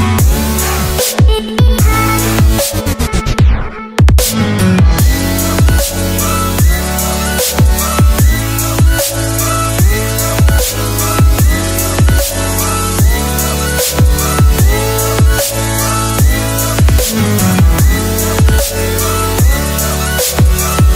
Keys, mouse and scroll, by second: 0.0 Return, 0.6 click, 15.3 click.